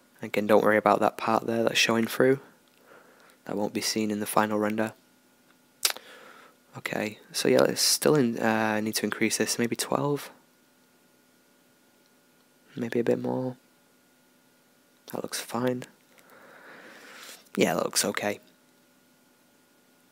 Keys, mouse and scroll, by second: 6.4-9.4 drag, 10.8-12.6 middle drag, 12.6-16.1 drag.